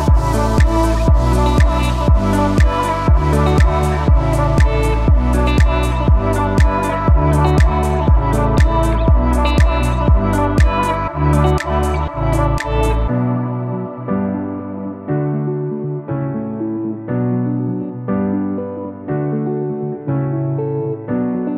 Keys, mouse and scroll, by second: 2.4 scroll down 1, 2.7-4.7 typing, 3.2 click, 4.1 click, 5.5 click, 6.8 right click, 7.8 click, 11.7-12.1 scroll down 1, 12.1 scroll, 12.1 scroll up 1, 13.3 click.